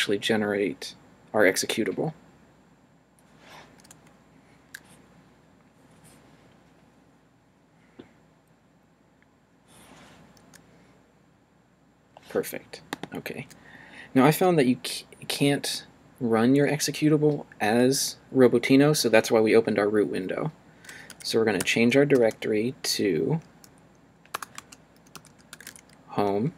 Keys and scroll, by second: 21.1 c, 21.6 d, 23.6-26.2 typing.